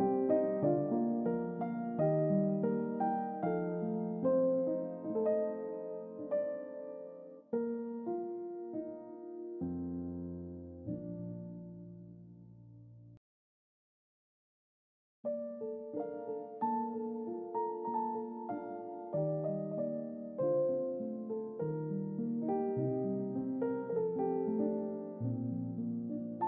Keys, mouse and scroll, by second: 0.0 shift+middle click, 0.7-1.3 middle drag, 1.8 click, 2.6 click, 3.3 click, 3.7-6.0 middle drag, 6.3 click, 7.9 middle click, 9.3 middle click, 9.4-9.9 scroll down 2, 9.9 scroll up 1, 11.7-12.9 drag, 15.0-15.7 middle drag, 16.1 click, 17.0 click, 18.1-22.0 middle drag, 22.4 ctrl+middle click, 23.1-24.7 middle drag, 24.9 ctrl+middle click, 25.9 middle click.